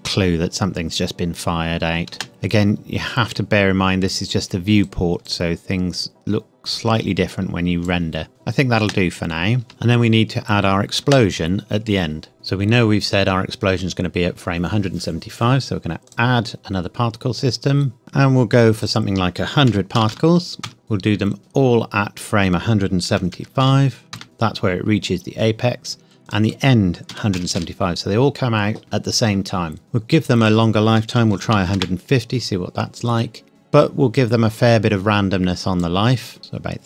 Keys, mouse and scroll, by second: 2.2 space, 3.3 click, 8.8 space, 9.7-10.6 scroll up 1, 10.6-11.0 scroll down 1, 11.0 space, 12.3-13.8 scroll up 1, 16.1 click, 18.8 click, 19.7 KP_1, 20.0 KP_0, 20.6 KP_Enter, 21.4 click, 23.3 KP_7, 23.6 KP_5, 24.2 KP_Enter, 24.2 click, 26.3 click, 27.1 KP_1, 27.4 KP_7, 27.6 KP_5, 28.3 KP_Enter, 30.4 click, 31.2 KP_1, 31.4 KP_5, 31.5 KP_0, 31.8 KP_Enter, 34.2 click.